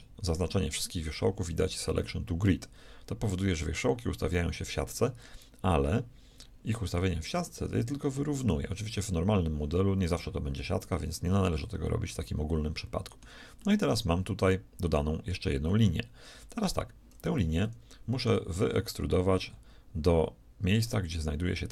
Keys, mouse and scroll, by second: 8.7-11.1 middle drag, 11.3 a, 11.8-15.4 middle drag, 20.7-21.7 right drag.